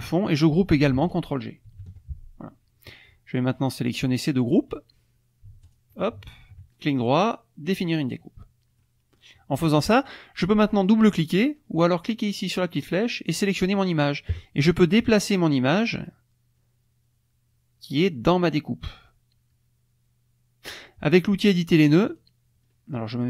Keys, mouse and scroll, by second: 1.7 ctrl+g, 5.6 shift+click, 6.2 shift+click, 6.7 shift+right click, 7.7 click, 8.8 click, 9.8 click, 12.6 click, 13.4 click, 14.7 click, 22.1 click.